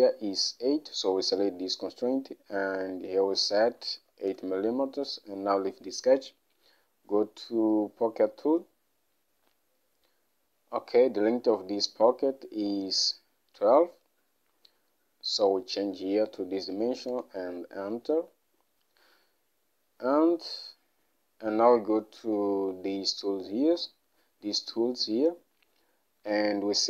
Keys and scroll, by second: 4.1 8, 4.4 Return, 16.3 1, 16.5 2, 17.2 Return, 20.7 Home, 23.7 Home.